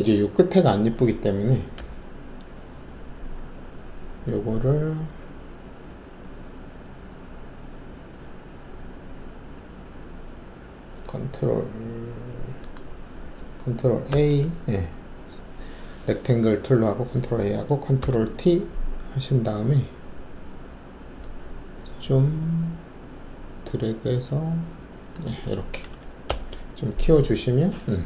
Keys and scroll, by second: 1.7 ctrl+-, 14.1 ctrl+a, 18.0 ctrl+t, 26.2 alt+Return.